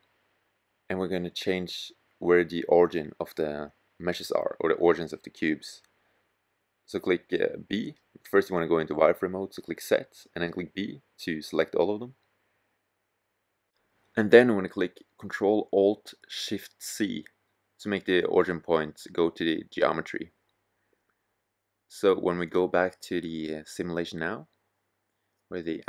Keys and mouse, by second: 4.3 a, 5.6 b, 7.9 z, 9.2 b.